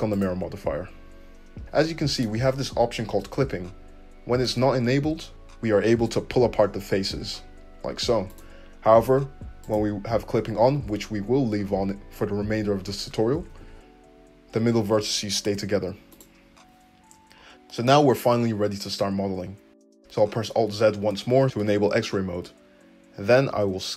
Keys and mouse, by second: 5.3 a, 6.0 g, 9.7-20.4 middle drag, 13.5 g, 20.3 alt+z, 23.6 s.